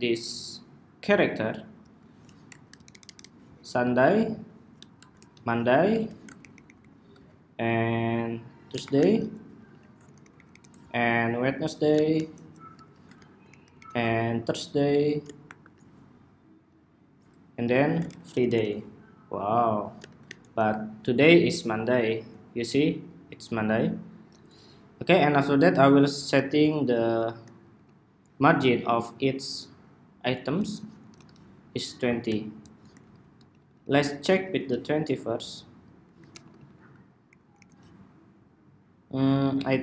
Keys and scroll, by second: 1.8 super+d, 5.0 ↺, 5.3 Escape, 5.7 super+d, 8.9 Escape, 9.4 super+d, 12.1 ⟲, 12.5 super+d, 16.4 ⟲, 17.5 super+d, 20.3 ⟲, 26.3 alt+shift+Right, 26.6 alt+shift+Right, 27.1 alt+shift+Right, 27.5 alt+Left, 30.8 alt+shift+Left, 32.8 alt+shift+Left, 33.4 alt+Left, 33.5 alt+Left, 33.9 alt+Left, 34.0 alt+Left, 36.0 alt+shift+Left, 37.0 alt+Right, 37.3 alt+Right, 39.7 alt+shift+Left.